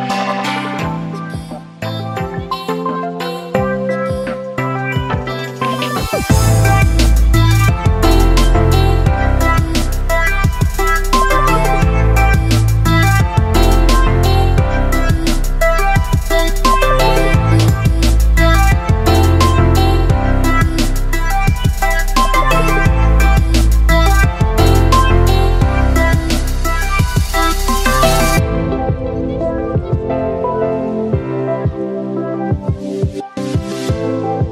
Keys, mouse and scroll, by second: 2.1-4.7 drag, 4.7 Up, 5.6 click, 6.2 Up, 7.1 Down, 10.9-13.5 drag, 13.6 shift+a, 13.7 shift+p, 13.8 shift+p, 14.8 right click, 15.5-17.7 typing, 15.9 Return, 18.3 Return, 20.0 click, 20.9-30.7 right drag, 30.7-31.6 typing, 32.4-34.5 right drag.